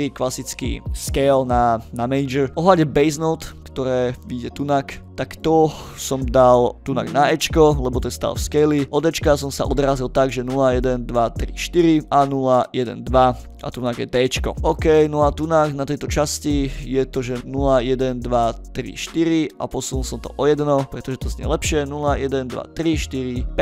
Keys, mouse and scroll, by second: 2.2 middle click, 3.5 click, 6.8 click, 16.0 click, 16.1-16.4 drag, 16.5 click, 19.5-20.8 drag, 20.9 click, 23.4-23.6 drag.